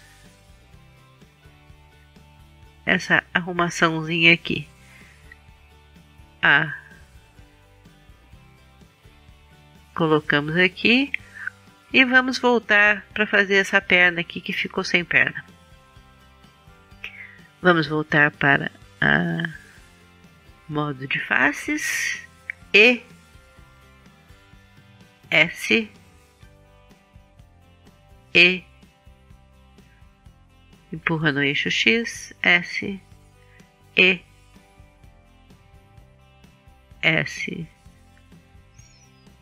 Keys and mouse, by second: 0.9 click, 1.9-6.9 middle drag, 5.9 a, 6.9-10.4 drag, 10.4-11.6 middle drag, 22.6 e, 25.6 s, 27.9 e, 30.1-32.1 drag, 33.7 e, 36.8 s.